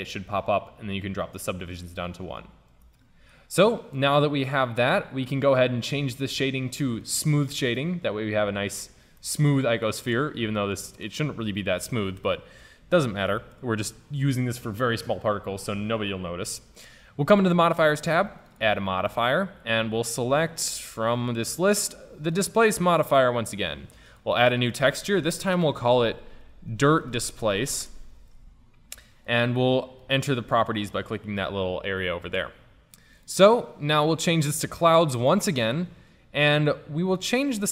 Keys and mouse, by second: 2.9-7.1 middle drag, 7.1-9.1 drag, 9.1-10.8 middle drag, 10.8-12.1 drag, 17.4-20.5 drag, 24.1-26.5 drag, 30.1-32.0 drag, 33.2-35.3 drag, 35.3-37.4 middle drag, 37.4-37.7 drag.